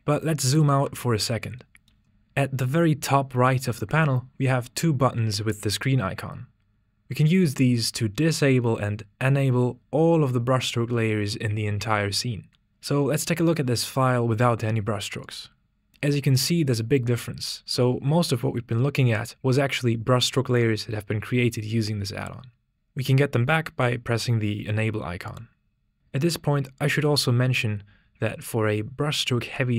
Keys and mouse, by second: 2.0 z, 15.4-16.5 typing, 25.3 click.